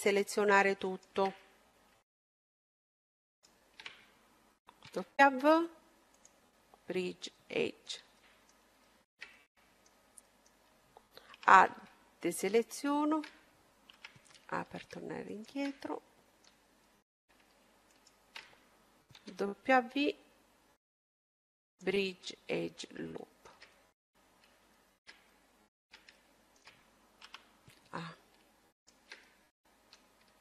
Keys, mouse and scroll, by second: 0.8-2.7 right drag, 1.3-4.1 middle drag, 3.3-4.9 right drag, 4.8 w, 6.8-11.7 middle drag, 11.1 a, 12.4-14.1 right drag, 13.7 a, 14.1 middle click, 15.1-17.0 right drag, 16.0-18.4 middle drag, 17.8-19.9 right drag, 19.1 w, 22.3-24.7 middle drag, 25.3-27.7 middle drag, 27.1 a, 28.7-30.4 right drag, 29.5-30.4 middle drag.